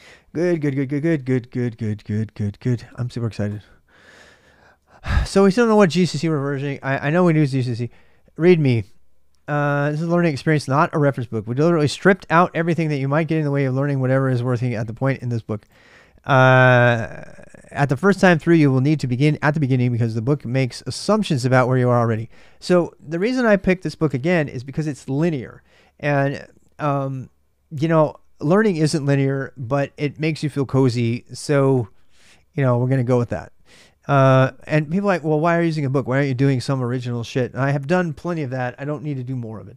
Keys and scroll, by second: 4.2 super+Tab, 6.0 super+Tab.